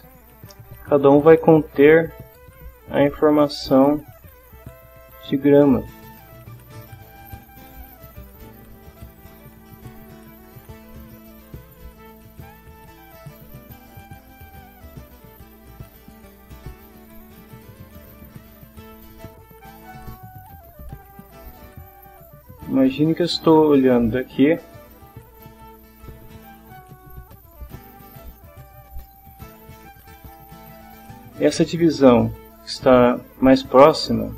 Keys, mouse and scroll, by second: 1.0 middle click, 2.6-3.9 drag, 4.8-6.1 drag, 7.1-9.3 drag, 9.7-10.8 middle drag, 14.8 click, 18.1 middle click, 19.5 middle click, 20.8-22.3 middle drag, 22.8 click, 23.6 click, 24.1 click, 24.1 middle click, 24.7 click, 25.2 click, 27.7-29.5 drag, 33.7 click.